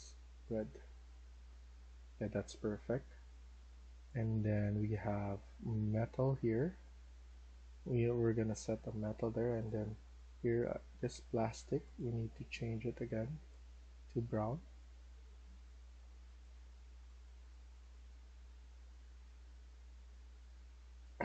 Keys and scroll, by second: 0.9 d, 2.7-6.4 typing.